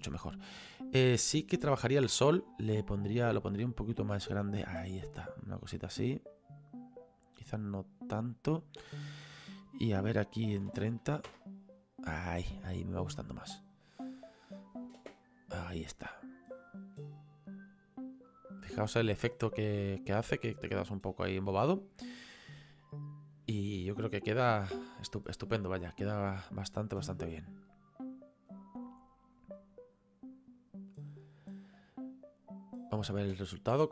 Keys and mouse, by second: 0.5 click, 2.0 click, 3.4 click, 9.0 click, 10.5 KP_3, 10.7 KP_0, 13.3 click, 15.0 space, 28.6 space, 29.6 click, 33.3 space.